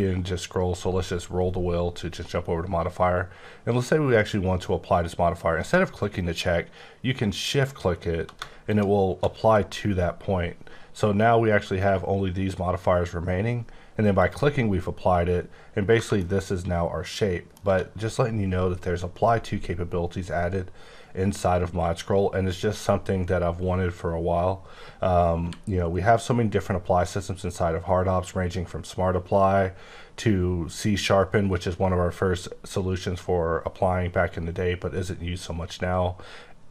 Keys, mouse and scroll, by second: 0.3 scroll up 1, 8.6 click, 10.6-11.1 scroll down 4, 11.1-11.9 scroll up 6, 11.9-12.4 scroll down 5, 12.4-14.1 scroll up 4, 14.1 click, 15.2-15.9 scroll up 2, 16.1 middle click, 25.4 q.